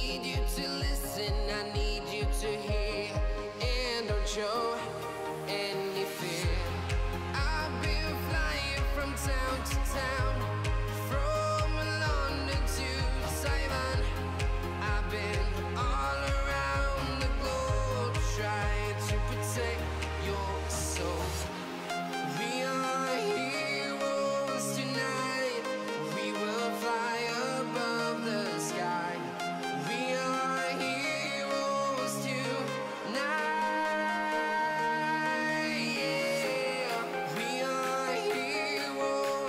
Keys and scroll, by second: 36.6 Escape.